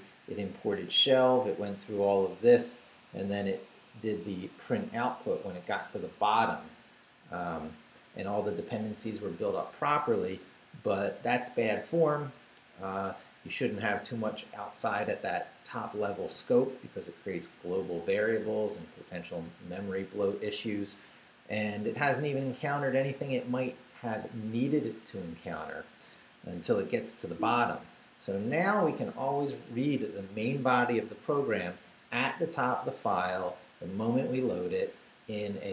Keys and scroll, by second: 0.9 Down, 1.5 Down, 2.2 Down, 3.2 Down, 4.8 Up, 25.5 Down, 27.0 Down.